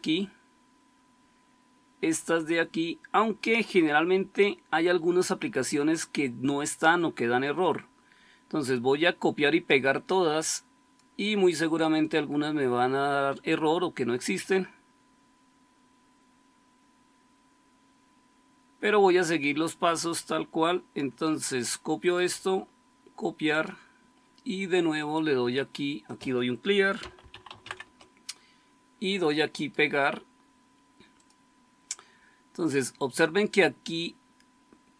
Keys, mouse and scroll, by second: 26.7-28.0 typing.